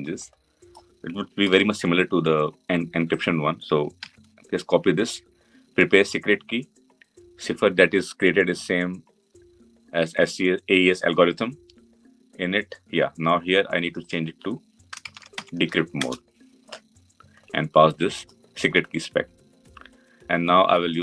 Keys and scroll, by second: 1.3 ctrl+c, 3.9 ctrl+v, 15.9 Return, 19.0 Return.